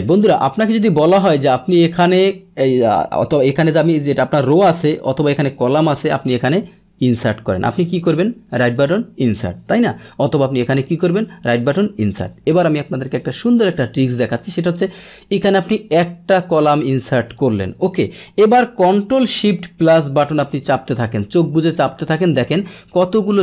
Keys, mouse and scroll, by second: 0.0 click, 0.5 click, 2.3-4.0 drag, 5.3 click, 6.2 click, 8.0 right click, 8.6 click, 9.2 click, 9.9 ctrl+z, 9.9 click, 10.8 right click, 11.5 click, 12.3 ctrl+z, 13.0 click, 13.1 ctrl+z, 15.4 right click, 17.3 click.